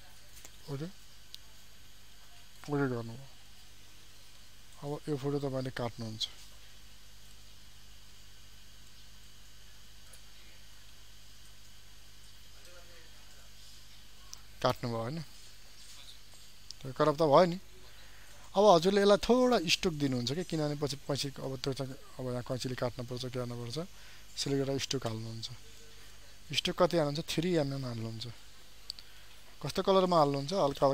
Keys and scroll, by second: 22.4 ctrl+a.